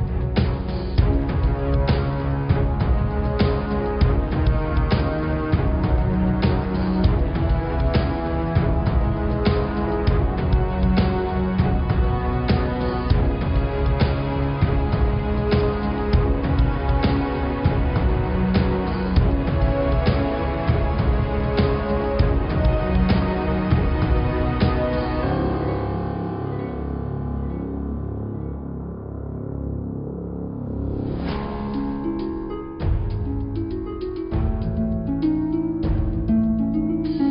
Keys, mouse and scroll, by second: 1.0-1.4 scroll down 3, 1.4 scroll up 4, 2.8 click, 3.2 scroll down 4, 3.3 middle click, 4.0 scroll up 1, 4.3 middle click, 4.8-5.2 scroll up 1, 5.2 shift+d, 7.5 s, 10.1 shift+d, 12.2 alt+e, 13.6-15.8 right drag, 16.6 r, 18.2 h, 19.0 ctrl+z, 19.7 g, 21.6 scroll down 5, 21.9 middle click, 22.9 click, 24.4 click, 24.7-25.5 scroll up 1, 25.5 shift+click, 26.0 shift+click, 28.3 g, 31.0 click, 31.6 scroll down 3, 32.3 g, 33.9 click, 35.1 g, 36.5 click, 37.1-37.3 scroll down 2.